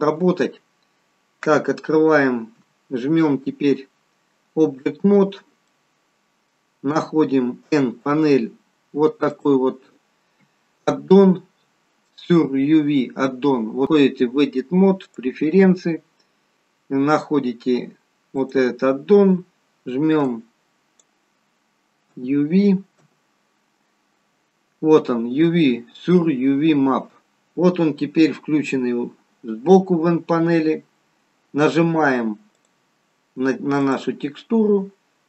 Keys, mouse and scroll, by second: 2.6 Tab, 5.6 middle click, 7.6 n, 9.3 click, 13.9 click, 32.5 click.